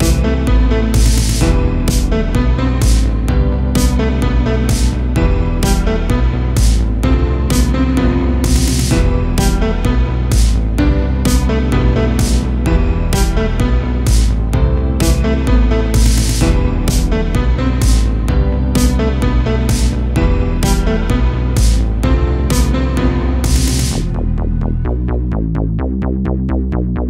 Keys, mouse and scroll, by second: 0.3 g, 1.7 shift+d, 2.2 g, 3.4 middle click, 3.8 scroll up 1, 4.1 g, 5.4 middle click, 6.3 KP_0, 6.9-7.3 scroll up 1, 7.3 r, 8.6 r, 9.7 g, 10.4 scroll down 1, 10.7 a, 10.9 a, 11.3-13.1 middle drag, 13.1 KP_7, 13.7 scroll up 1, 14.6-15.9 shift+middle drag, 15.9 l, 17.2 shift+d, 17.7 g, 18.7 middle click, 19.2-19.9 scroll up 5, 19.9 r, 21.0 Page_Down, 21.2 KP_7, 21.9 shift+middle click, 22.8 r, 23.9-25.3 middle drag, 25.3-25.7 scroll up 2, 25.7 g, 26.8-27.0 scroll down 1.